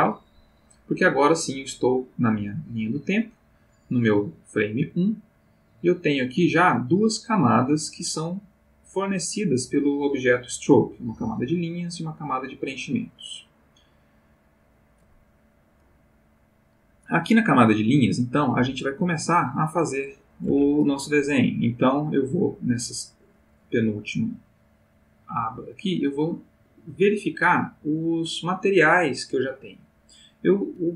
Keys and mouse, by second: 2.8 middle click, 4.0-4.5 middle drag, 12.3 click, 12.7 click, 13.2 click, 13.5 click, 14.2 click, 25.7 click.